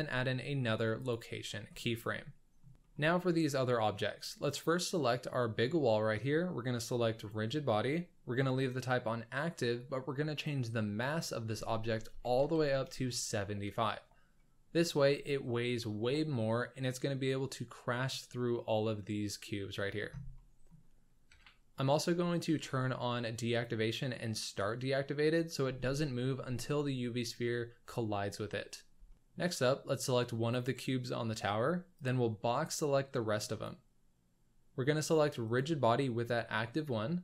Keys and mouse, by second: 1.9-2.6 middle drag, 2.8 shift+middle click, 7.1-13.0 drag, 14.3-14.7 middle drag, 20.3-20.7 middle drag, 21.3 KP_1, 24.5 click, 25.6 z, 29.0 shift+click, 30.5 click, 32.0-33.7 drag, 35.4 click.